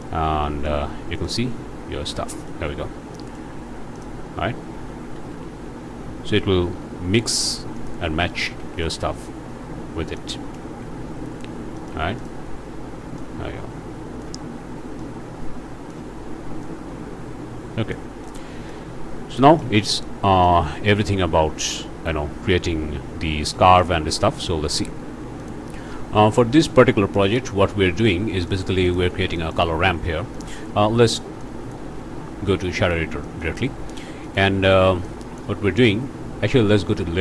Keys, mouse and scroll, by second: 0.7 click, 1.4 z, 2.5-3.5 drag, 3.9 click, 5.1 r, 7.8 click, 8.2 scroll down 2, 8.6 alt+a, 8.8-10.4 alt+drag, 10.6 ctrl+space, 11.3-11.6 ctrl+scroll up 1, 11.8 shift+middle click, 12.2 shift+middle click, 13.2-14.4 middle drag, 15.0-16.1 middle drag, 16.6-18.0 middle drag, 18.0 click, 18.2 click, 19.0-19.4 scroll up 1, 19.4 shift+click, 20.4 click, 23.8 click, 25.4 click, 26.6 click, 27.8 scroll up 1, 28.5 click, 29.0 shift+click, 29.1 shift+a, 30.4 click, 31.4 click, 32.1-32.7 scroll up 2, 32.7 click, 33.1 scroll up 1, 33.4 click, 33.7 scroll down 1, 34.2 click, 35.1 click.